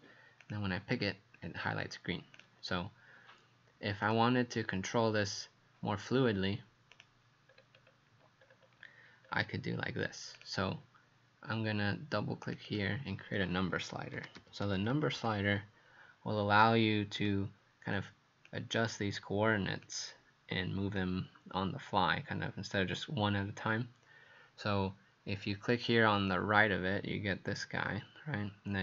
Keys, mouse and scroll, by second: 0.4 click, 7.5-8.4 scroll down 4, 8.4-9.3 scroll down 3, 9.3-10.4 scroll down 3, 12.7 click, 13.7-15.7 typing, 17.2 click.